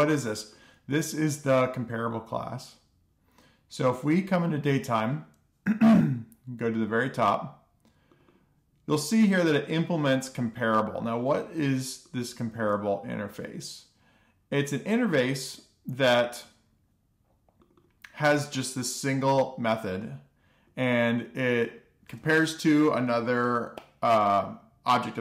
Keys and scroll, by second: 0.6 alt+shift+f, 1.1 super+s.